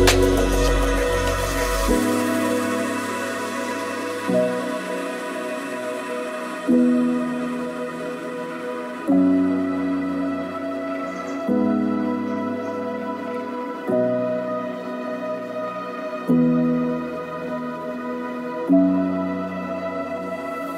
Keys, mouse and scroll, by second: 0.0 click, 2.6 click, 3.1 click, 3.9 ctrl+click, 4.3 middle click, 6.2 ctrl+click, 10.2 click, 11.0-12.7 right drag, 12.8 middle click, 12.9 KP_0, 13.1 shift+middle click, 13.3 x, 13.8 shift+middle click, 14.5 middle click, 14.5 shift+KP_0, 15.4 click, 15.6 KP_0, 19.7 KP_0, 20.3 shift+d, 20.7 click.